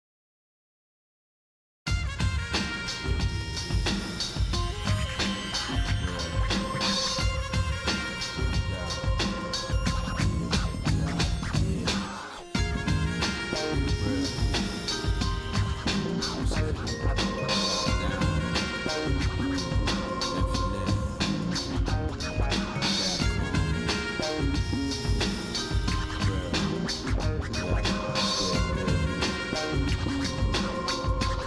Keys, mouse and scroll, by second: 0.2 shift+click, 0.7 shift+middle click, 1.3 middle click, 2.2 shift+click, 3.1 x, 5.7-6.7 shift+middle drag, 7.0 ctrl+z, 8.2 z, 12.9 z, 14.4 x, 16.1 shift+middle click, 16.7 middle click, 17.9 click, 18.8 ctrl+Tab, 20.7 shift+middle click, 22.2 scroll up 2, 22.3-22.7 scroll down 1, 22.7 scroll up 1, 22.7 ctrl+Tab, 23.8 click, 24.4 middle click, 25.0 middle click, 25.5 middle click, 25.9 shift+middle click, 27.1 shift+click, 28.5 z, 30.5 x.